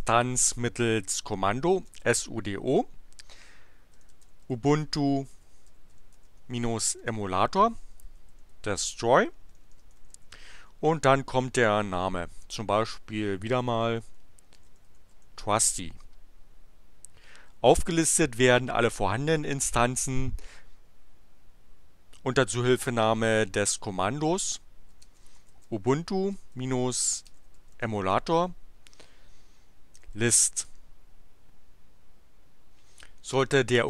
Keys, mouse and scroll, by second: 1.4-10.6 typing, 13.6-15.6 typing, 20.9 BackSpace, 24.6-28.3 typing, 29.7-30.9 typing.